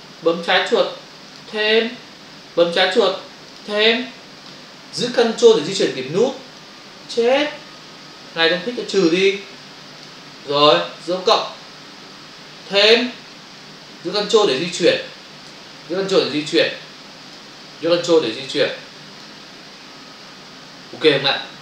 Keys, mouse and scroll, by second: 1.3 click, 3.4 click, 3.6 click, 6.6 ctrl+click, 9.9 click, 10.1 click, 12.7 click, 14.8 ctrl+click, 16.6 ctrl+click, 18.7 ctrl+click.